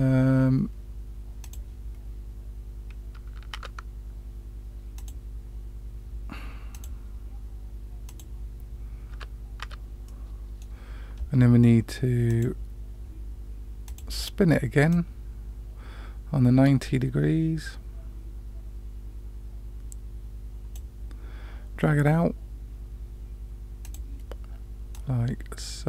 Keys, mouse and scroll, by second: 1.4 click, 3.5 Tab, 4.9 click, 6.7 click, 8.0 click, 9.1 Tab, 9.6 Tab, 10.0 middle click, 12.2 click, 13.8 click, 14.9-20.7 drag, 23.8 click, 24.9-25.8 drag.